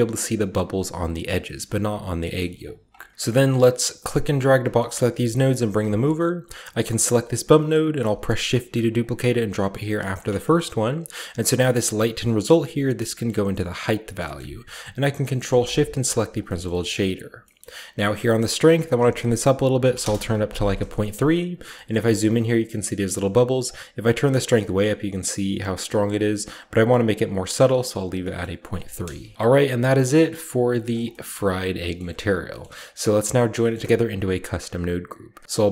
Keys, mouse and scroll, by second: 1.9 scroll down 1, 2.2 middle click, 2.4 click, 3.1 a, 3.1 a, 4.0-5.5 drag, 4.9-5.6 typing, 5.7-6.7 scroll up 1, 6.7 click, 7.4-8.0 scroll up 1, 7.8 typing, 8.8 click, 9.1 click, 9.9 drag, 10.9 click, 12.1-13.6 drag, 14.2-15.4 scroll up 4, 15.4 ctrl+shift+click, 17.2-18.6 ctrl+shift+middle drag, 17.2 typing, 17.7-19.6 shift+scroll up 1, 18.5-19.8 drag, 19.6 typing, 19.8 Return, 20.8 shift+middle click, 20.8-22.7 shift+scroll up 1, 21.7-23.2 shift+middle drag, 22.7-23.4 shift+scroll up 1, 23.4-26.9 drag, 26.9-27.8 scroll down 1, 27.8 scroll down 1, 28.2-29.3 middle drag, 28.6-29.4 typing, 29.3-30.4 scroll down 1, 30.4 click, 30.6 scroll down 1, 32.8 click, 33.4-35.7 drag, 35.4 ctrl+z, 35.4 a.